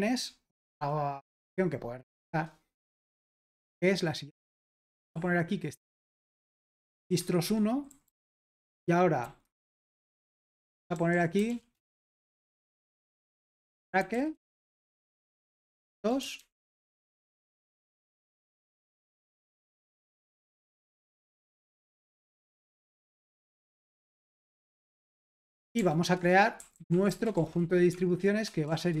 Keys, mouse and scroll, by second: 0.0-1.0 typing, 3.0-3.8 typing, 4.8-8.4 typing, 7.4 Escape, 9.4-11.9 typing, 13.2-19.6 typing, 21.0-22.1 typing, 22.3 Return, 23.3-29.0 typing, 26.2 Return.